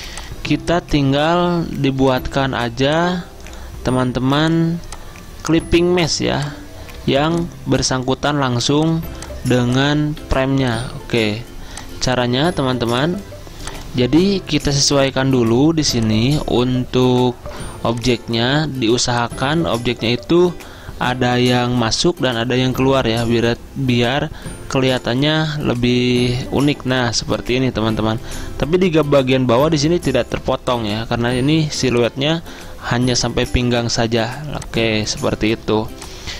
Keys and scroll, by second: 1.7 Delete, 2.6 Delete, 6.2 Delete, 7.0 Delete, 10.3 Delete, 11.1 Delete.